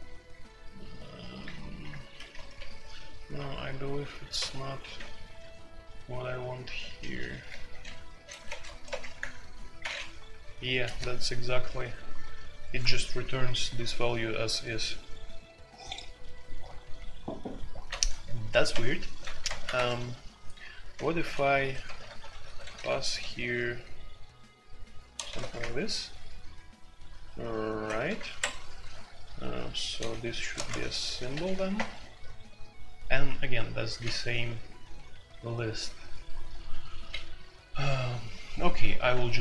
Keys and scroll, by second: 0.6 typing, 1.9-6.2 typing, 7.4-9.7 typing, 18.7 alt+p, 19.4 alt+p, 19.7 Escape, 19.8-22.4 typing, 23.5 typing, 25.3 shift+a, 25.6 Return, 27.7-31.6 typing, 28.0 alt+p, 30.6 ctrl+g, 31.7 Return, 39.2 alt+1.